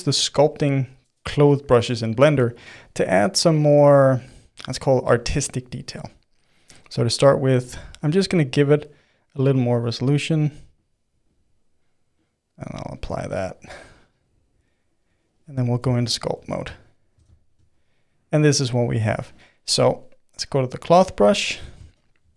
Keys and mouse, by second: 2.5-5.5 middle drag, 6.0 click, 7.6 click, 8.5-11.6 drag, 12.2-15.0 drag, 15.6-20.8 middle drag, 20.8-21.8 drag, 21.8-22.3 shift+middle drag.